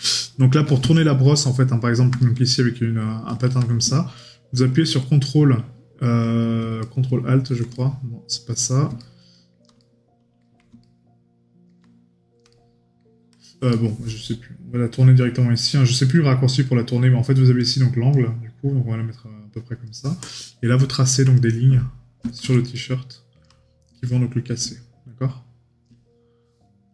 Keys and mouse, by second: 0.9 right click, 2.2 right click, 4.2 right click, 6.8 right click, 9.0 right click, 12.5 right click, 22.7 right click.